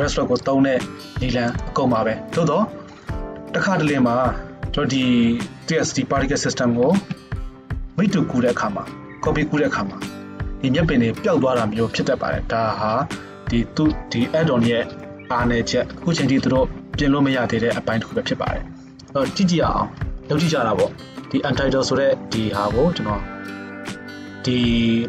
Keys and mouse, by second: 6.9 shift+space.